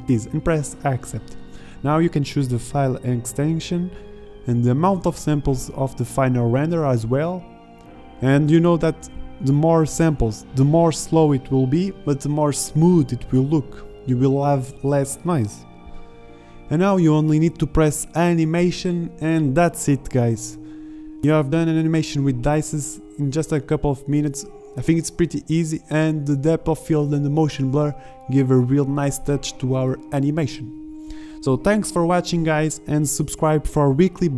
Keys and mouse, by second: 9.5 shift+z, 13.6 shift+z.